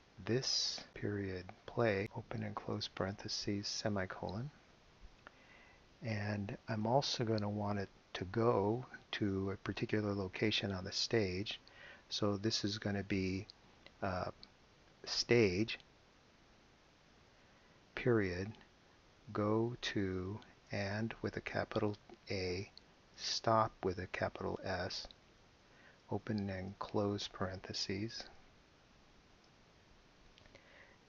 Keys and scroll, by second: 0.2-4.3 typing, 6.0 Return, 16.2-22.0 typing, 23.5 shift+s, 25.1 t, 25.5 p, 26.2 shift+8, 27.8-29.7 typing.